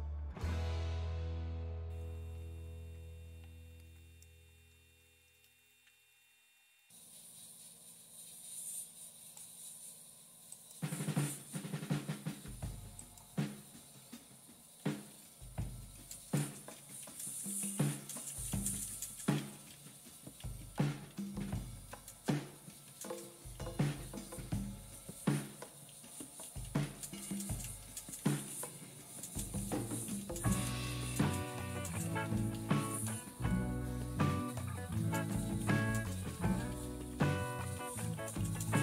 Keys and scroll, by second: 14.8 typing, 16.3-38.8 typing.